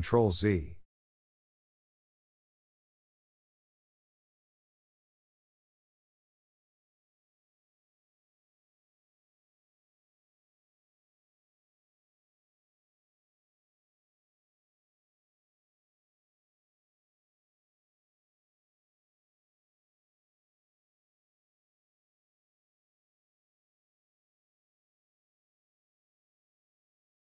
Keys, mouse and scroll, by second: 1.5-2.1 scroll down 3, 2.1 1, 2.4 click, 3.8 ctrl+z, 4.1 ctrl+z, 4.3 ctrl+z, 4.5 ctrl+z, 4.8 ctrl+z, 5.0 ctrl+z, 5.3 ctrl+z, 5.6 ctrl+z, 5.8 ctrl+z, 6.1 ctrl+z, 6.3 ctrl+z, 7.4 shift+middle click, 8.1 g, 10.7-12.4 middle drag, 12.4 2, 12.8 alt+click, 13.3 g, 17.3 scroll down 2, 17.5 middle click, 18.4 Tab, 18.8-20.3 middle drag, 20.3 ctrl+z, 20.5 ctrl+z, 20.8 ctrl+z, 21.0 ctrl+z, 21.6 ctrl+z, 22.0 ctrl+z, 22.3 ctrl+z, 22.7 ctrl+z, 23.2 ctrl+z, 23.6 ctrl+z, 24.0 ctrl+z, 24.3 ctrl+z, 25.3 click, 25.6 Tab, 25.8 click, 26.2 Tab, 26.5-27.0 scroll up 1, 27.0 shift+middle click.